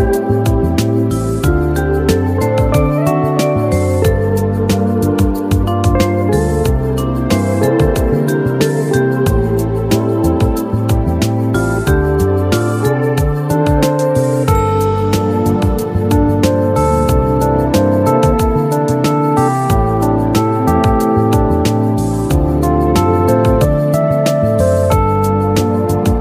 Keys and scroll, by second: 0.2 ctrl+z, 3.9 ctrl+z, 8.3 ctrl+shift+q.